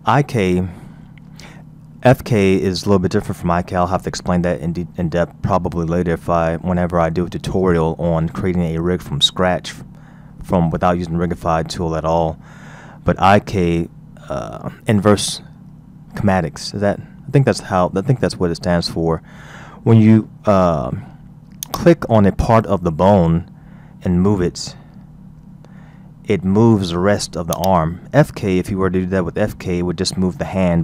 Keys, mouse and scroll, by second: 7.9-8.6 scroll down 3, 9.3-12.4 scroll up 3, 13.2-14.0 scroll up 3, 18.9-19.3 scroll down 2, 20.0-21.6 scroll up 2, 21.6 click, 25.2 r.